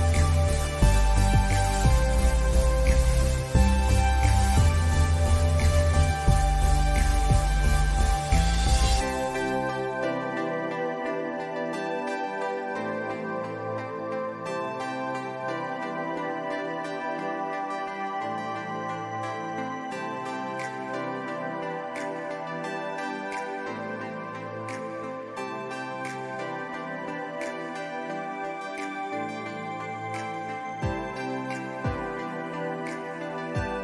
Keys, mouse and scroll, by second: 0.4-2.2 drag, 2.2-4.2 drag, 4.1 shift+Num_Lock, 6.3 click, 7.9-8.6 alt+scroll up 2, 9.4 click, 10.1 scroll down 1, 11.4-11.7 scroll down 1, 11.7-16.7 drag, 19.2 click, 20.4-20.9 scroll up 2, 21.6-26.9 drag, 26.9 ctrl+z, 27.5-30.9 drag, 31.3-33.4 drag, 33.4-33.8 scroll down 2.